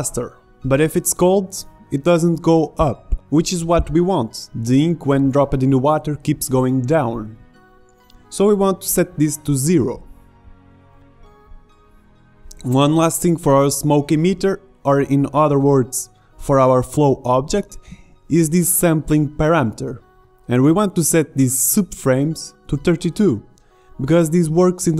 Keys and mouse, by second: 1.5 middle click, 3.3-6.7 drag, 6.7 middle click, 19.0-21.1 drag.